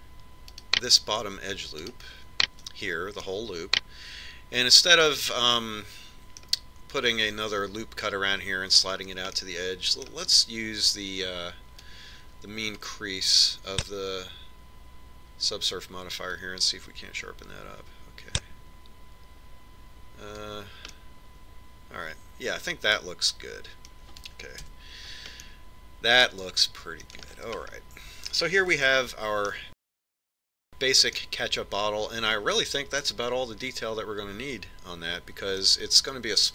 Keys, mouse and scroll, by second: 0.7-5.3 right drag, 5.1-7.1 middle drag, 11.2-13.3 middle drag, 13.7 click, 18.2 click, 22.9-24.8 middle drag, 26.6 Tab, 27.4-29.8 middle drag, 29.8-30.8 scroll up 1, 30.8-33.9 middle drag.